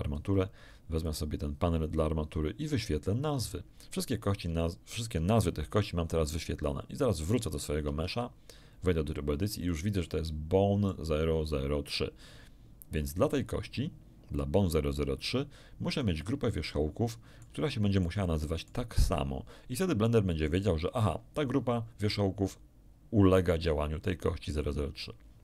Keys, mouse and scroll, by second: 1.0 click, 3.4 click, 4.2-4.5 scroll down 1, 4.6 shift+middle click, 7.3 click, 7.8 Tab, 9.6 middle click, 11.4 scroll up 1, 16.0-17.6 middle drag.